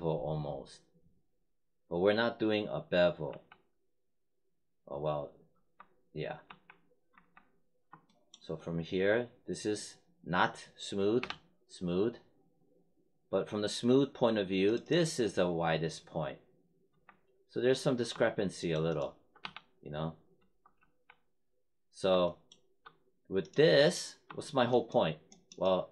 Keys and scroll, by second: 3.2 3, 5.5 1, 6.4 3, 7.0 1, 11.2 3, 16.8 1, 19.4 3, 20.3 1, 20.7 3.